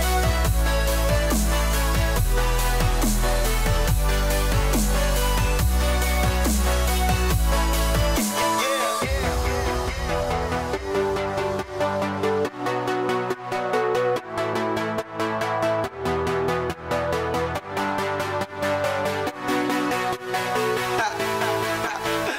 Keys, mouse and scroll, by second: 0.9 click, 3.1 click, 6.7 click, 7.6 click, 8.9 click, 10.5 click, 11.7 click, 13.4 click, 14.1 click, 17.1 click, 18.0 click.